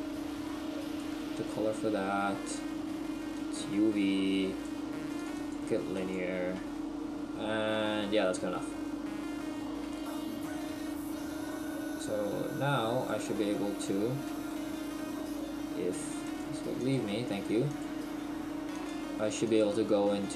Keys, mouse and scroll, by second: 6.1 click, 8.3 Tab, 8.3-8.6 scroll down 8, 13.0 right click, 14.5 shift+middle click, 16.9 click, 19.5 click.